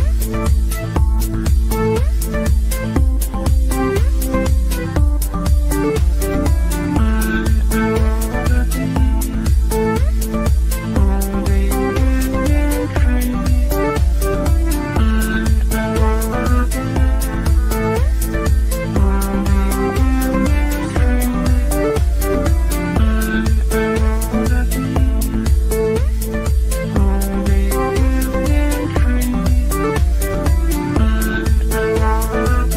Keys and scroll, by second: 3.8 g.